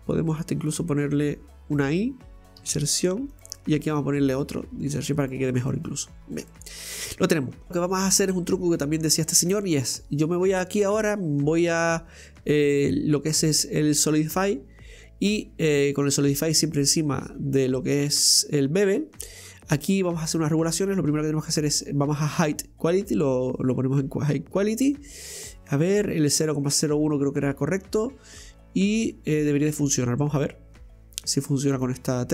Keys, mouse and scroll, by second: 0.7 click, 1.2 right click, 3.6 middle click, 4.3 right click, 5.7 middle click, 6.2-6.5 scroll up 2, 6.5 middle click, 6.8-7.7 scroll up 1, 7.7-10.7 middle drag, 16.0-22.2 drag.